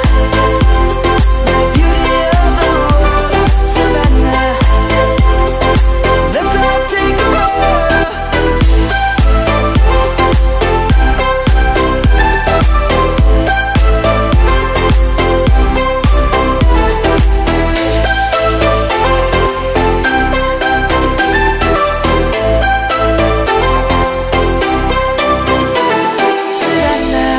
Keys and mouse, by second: 0.1 click, 4.4 click, 4.8 middle click, 5.6 Tab, 6.6 click, 7.8 middle click, 10.0 click, 13.4 middle click, 16.0 click, 17.8 Tab, 18.4 click, 18.9 middle click, 22.2 middle click, 24.9 click, 25.1 Tab, 25.8 click.